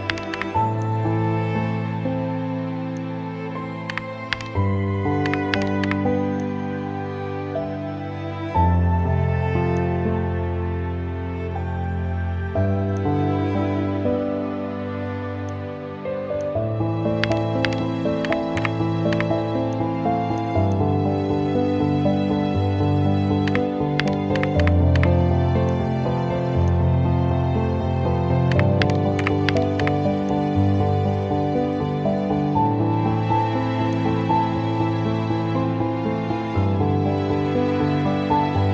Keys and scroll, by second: 0.1 KP_7, 0.3 KP_5, 3.9-5.8 typing, 17.3-19.1 typing, 23.5-24.9 typing, 28.5-29.7 typing.